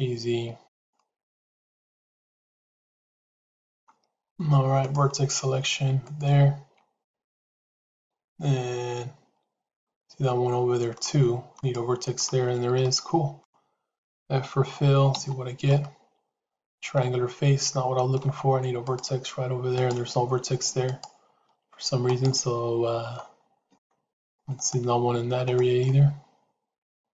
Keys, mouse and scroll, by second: 0.8-3.8 middle drag, 4.8 click, 6.0 shift+click, 7.0-10.9 middle drag, 11.4 shift+click, 12.7 middle click, 15.1 f, 15.6-18.1 middle drag, 18.7 click, 19.8 click, 20.7 shift+click, 24.0 click, 24.5 click, 25.7-27.1 middle drag.